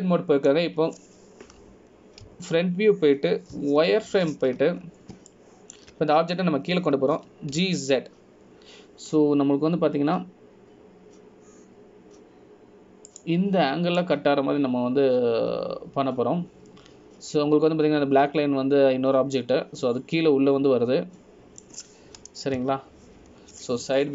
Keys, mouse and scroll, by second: 0.9 Tab, 1.7 middle click, 4.4 KP_1, 5.7 z, 7.0 scroll up 2, 7.5 shift+middle click, 9.3 g, 15.9 scroll down 1, 16.1 middle click.